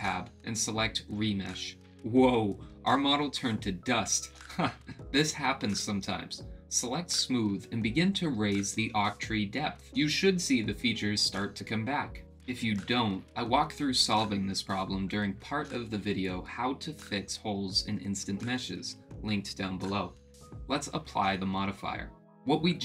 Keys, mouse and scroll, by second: 0.8-2.3 drag, 9.3-11.3 drag.